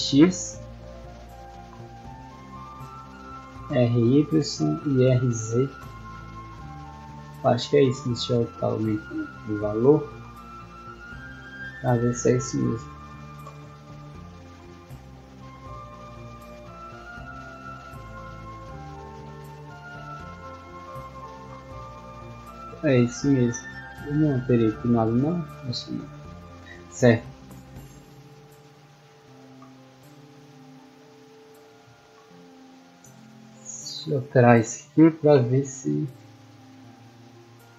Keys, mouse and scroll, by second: 0.0 scroll up 2, 1.1 r, 2.7 right click, 3.5 r, 4.7 right click, 5.7 r, 6.9 right click, 8.6 click, 11.2 middle click, 12.4 middle drag, 14.1 d, 14.6 a, 16.4-17.1 typing, 18.9-19.7 typing, 21.0 w, 21.9 a, 22.9 scroll down 2, 23.3 middle click, 24.5-25.7 middle drag, 27.0-28.2 typing, 33.5 click, 34.0 click.